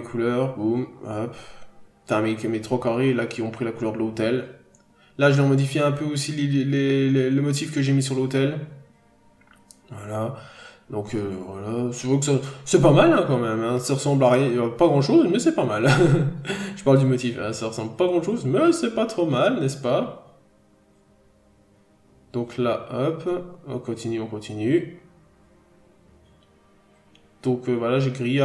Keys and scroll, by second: 9.2 p, 9.9 p, 11.7 b, 15.0-15.6 scroll up 1, 15.9 p, 17.1 scroll down 1, 17.6 n, 20.6 n, 26.9 scroll down 1, 27.5 p.